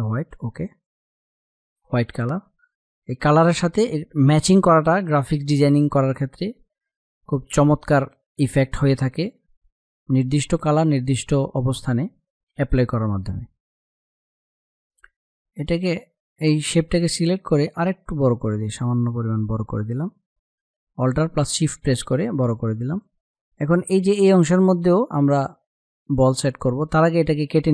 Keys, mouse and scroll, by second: 15.7 click, 26.7 click.